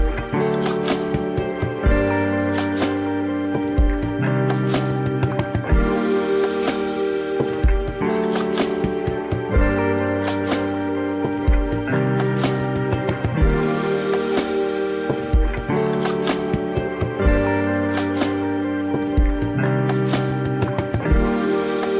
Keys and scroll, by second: 12.0 ctrl+shift+i, 12.4 ctrl+x, 14.1 ctrl+e.